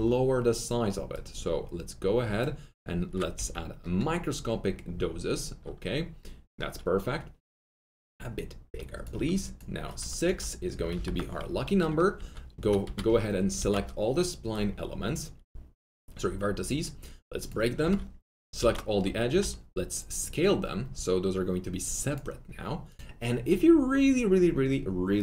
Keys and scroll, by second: 0.0-0.2 typing, 3.3 z, 7.8 z, 10.2 5, 10.7 Return, 10.9 6, 11.0 Return, 12.8 1, 13.5 ctrl+a, 17.8 2, 18.5 ctrl+a, 19.2 ctrl+r.